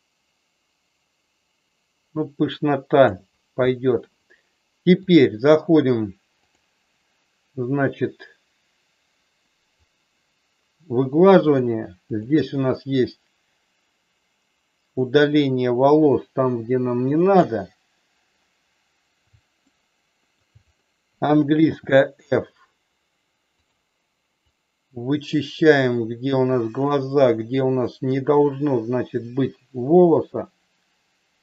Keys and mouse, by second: 5.0-6.6 drag, 8.0-9.6 drag, 12.1 click, 13.0-17.4 drag, 19.8 shift+middle click, 21.6 f, 24.5-31.4 drag.